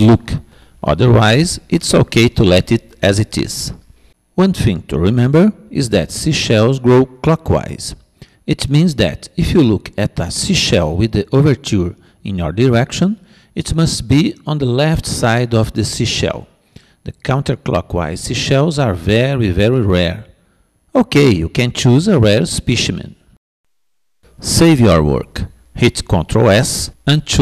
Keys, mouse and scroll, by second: 0.5-5.3 middle drag, 10.8-12.6 middle drag.